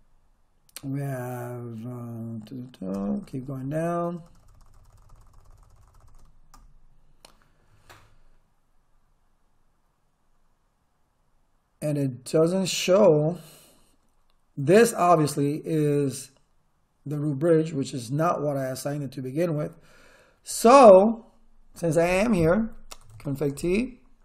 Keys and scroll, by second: 2.9 Return, 21.0 Return, 22.8-24.2 typing.